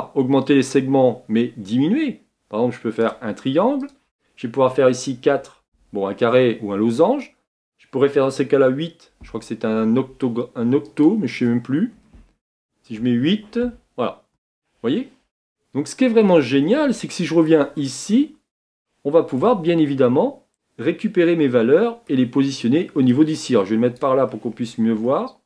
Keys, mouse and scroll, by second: 15.5-25.4 shift+middle drag.